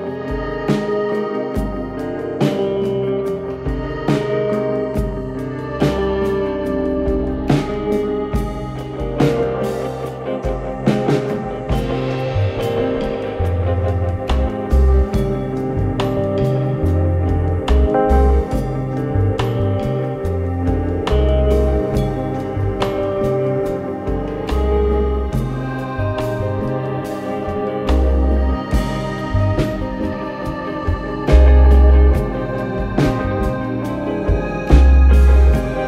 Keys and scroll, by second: 0.3 ], 4.0 1, 4.1 Return, 12.1 Delete, 12.4 ], 14.0 ], 16.0 3, 16.7 4, 17.6 2, 18.0 ], 19.7 ], 32.0-32.8 typing.